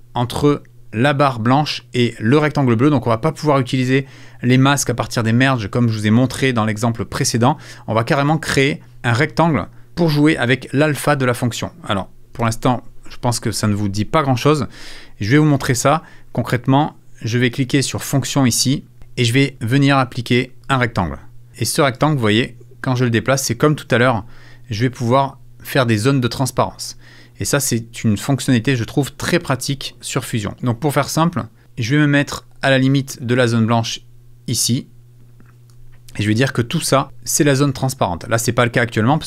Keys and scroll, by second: 12.4 super+f.